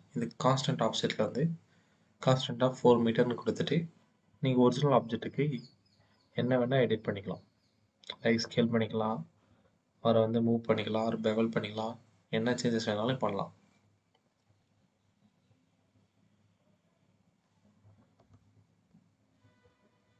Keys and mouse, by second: 18.0 Tab.